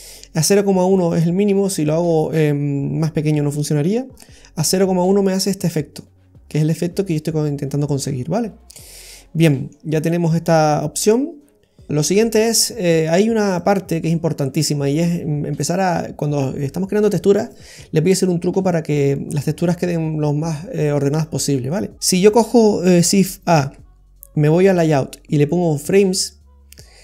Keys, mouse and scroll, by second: 0.4 scroll up 2, 0.9 middle click, 4.1-4.6 scroll up 1, 4.6 middle click, 4.6-5.3 scroll up 2, 8.9-9.5 scroll down 4, 9.4 middle click, 10.1 middle click, 13.6 click, 15.6 click, 21.2 click, 21.9 scroll down 3, 23.6 shift+a.